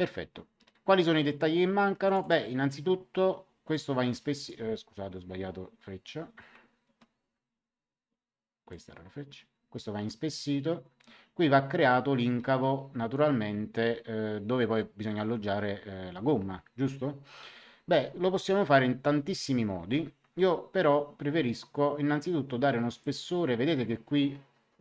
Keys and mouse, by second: 2.0 click, 3.7 click, 6.6 ctrl+z, 8.6 click, 22.9 click.